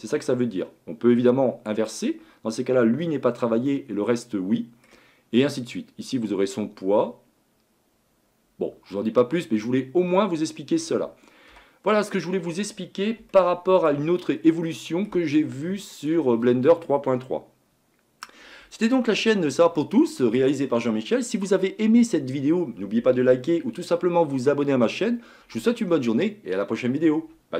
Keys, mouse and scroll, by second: 1.9 click, 3.7-11.5 middle drag, 11.5 KP_Divide, 12.4-13.3 scroll down 6, 13.3-14.2 shift+middle drag, 14.2-14.7 scroll down 4, 14.7-16.2 middle drag, 16.2-19.2 scroll up 1.